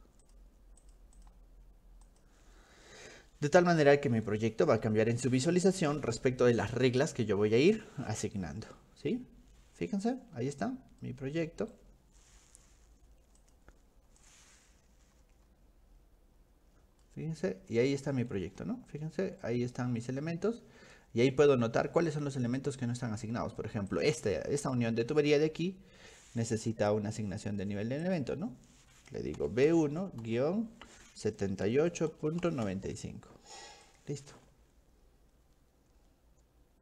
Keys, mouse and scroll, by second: 0.2 click, 0.8 click, 1.2 click, 2.1 click, 9.8-10.6 scroll up 4, 11.0-11.7 scroll up 2, 11.4 middle click, 13.4 middle click, 14.2 click, 15.1-15.6 scroll up 2, 17.0 middle click, 18.5 shift+middle click, 18.8-19.3 scroll down 2, 19.0 shift+middle click, 19.3 middle click, 20.0 middle click, 20.5 middle click, 23.0 scroll up 2, 23.9 click, 28.1 click, 29.4 b, 29.7 1, 30.2 -, 31.4-33.2 typing, 33.9 click.